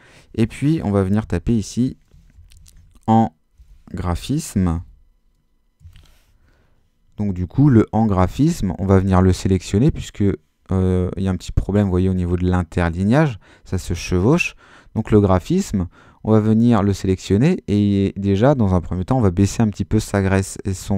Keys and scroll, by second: 1.2-5.8 typing.